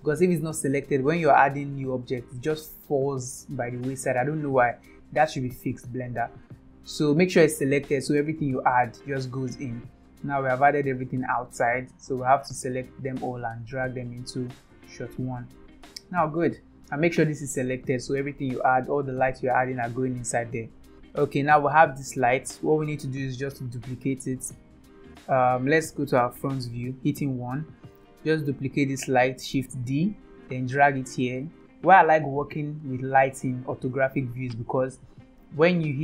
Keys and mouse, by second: 2.4 click, 7.7 click, 8.4-9.5 drag, 10.5-11.5 drag, 12.7-14.8 drag, 15.9 click, 17.0 click, 20.9 middle click, 21.9 click, 24.0 KP_7, 26.2 KP_1, 29.7 shift+d.